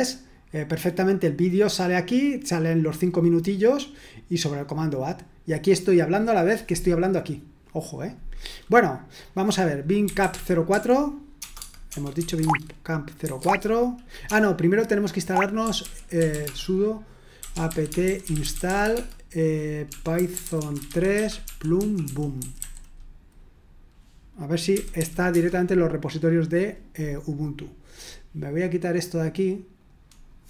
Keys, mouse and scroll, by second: 9.1 click, 9.8-22.6 typing, 12.4 Tab, 24.7 typing, 25.3 Return, 29.0-30.4 drag.